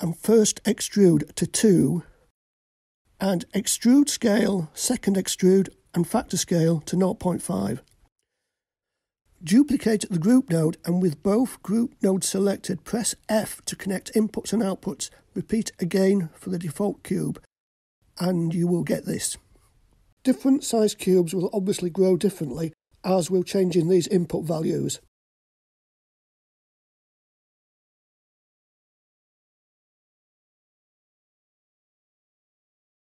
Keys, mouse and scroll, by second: 2.7-5.5 drag, 8.6 scroll down 2, 9.2-9.7 middle drag, 10.5 click, 12.4 shift+d, 14.3 click, 16.2 shift+click, 18.5-20.8 typing, 29.2-30.7 scroll down 2, 30.7 click, 30.7 scroll down 1.